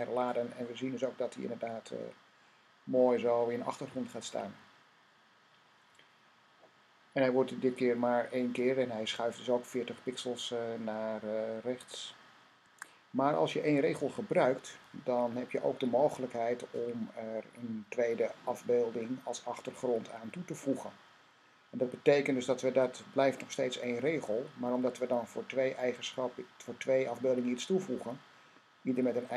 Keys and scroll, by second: 12.5 Tab.